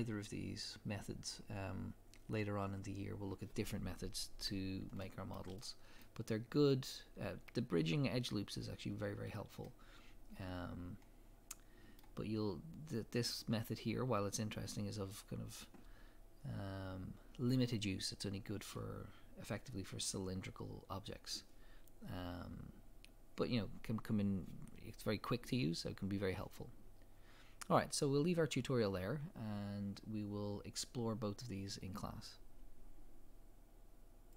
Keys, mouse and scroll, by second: 2.3-3.3 scroll up 2.